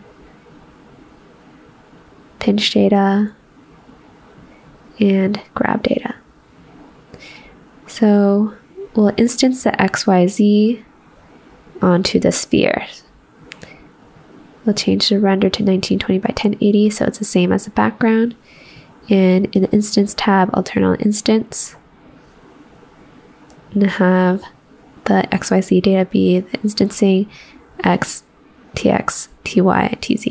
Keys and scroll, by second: 0.0-0.4 typing, 3.2-4.0 typing, 6.0-6.9 typing.